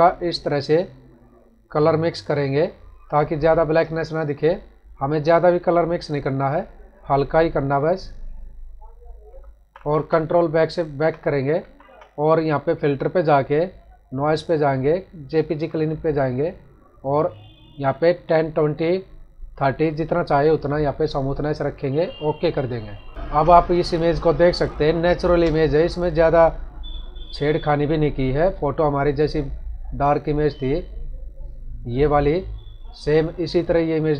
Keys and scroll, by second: 9.5 ctrl+-, 10.9 ctrl+=, 11.5 ctrl+-, 23.1 ctrl+-, 23.2 ctrl+=, 23.7 space.